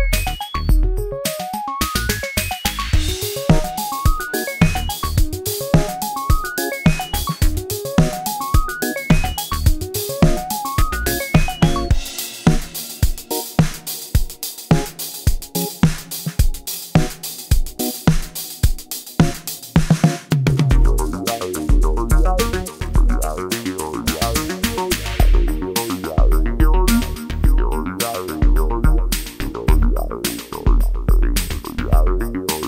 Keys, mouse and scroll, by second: 0.0-0.6 scroll up 1, 1.3-4.2 drag, 4.2-12.3 drag, 12.7-18.6 drag, 18.6-20.4 drag, 20.4 F4, 20.8 scroll up 1, 22.2-25.2 drag, 25.2 click, 26.1 click, 26.5 F4, 28.0 click, 29.2 ctrl+g, 29.4 click, 31.3 click.